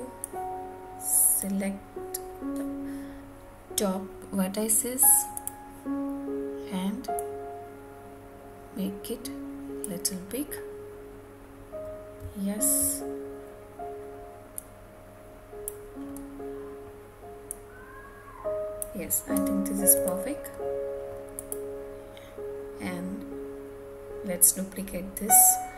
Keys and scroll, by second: 19.3 Tab.